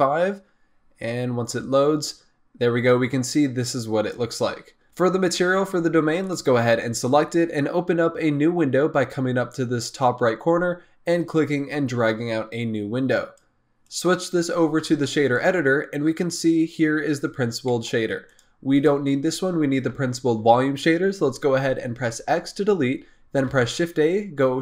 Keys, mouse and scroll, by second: 1.8-4.4 drag, 4.5-4.8 scroll down 2, 6.2 click, 11.0-16.1 drag, 16.1-17.2 scroll up 4, 17.2-17.6 scroll up 3, 17.6-18.2 middle drag, 18.2 click, 18.7 click, 22.0 x, 23.5 shift+a.